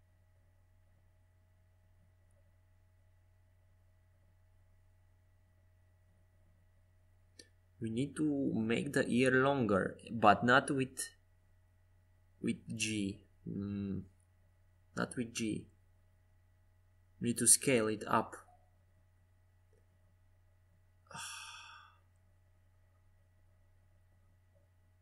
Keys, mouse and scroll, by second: 1.5 ctrl+z, 2.1 ctrl+z, 3.6 g, 5.6 middle click, 6.5 KP_5, 7.1 KP_1, 8.2 KP_5, 9.2 KP_3, 13.2 g, 17.2-19.5 middle drag, 18.9 Tab, 19.5 right click, 20.1-22.1 middle drag, 20.9 r, 24.5 g.